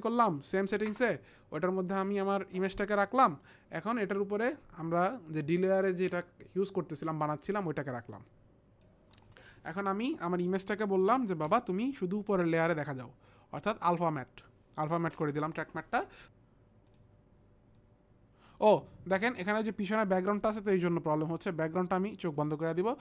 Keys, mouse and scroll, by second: 0.9 Return, 2.1 click, 7.1 click, 11.3 click, 11.5 F4, 12.2 click, 14.9 click, 16.2 t, 16.9 click, 17.7 click, 22.3 click.